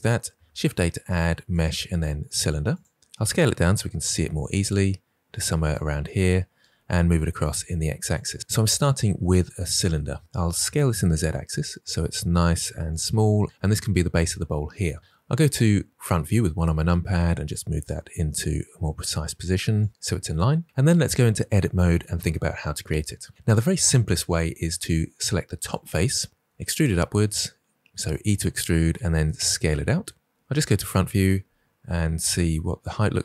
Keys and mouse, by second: 0.4 shift+a, 3.2 s, 5.5 click, 6.5 g, 6.8 x, 8.1 click, 10.5 s, 10.7 z, 15.0 KP_1, 17.7 g, 21.3 Tab, 25.6 click, 26.4 e, 26.8 z, 27.7 z, 28.2 click, 28.8 s, 30.3 KP_1, 30.5 KP_1, 32.5 g, 32.8 z.